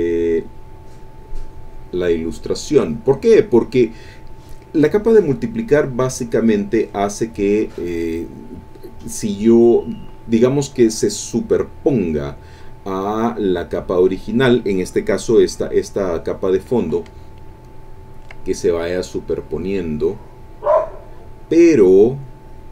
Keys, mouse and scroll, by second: 17.3 ctrl+click, 17.8-22.7 ctrl+drag.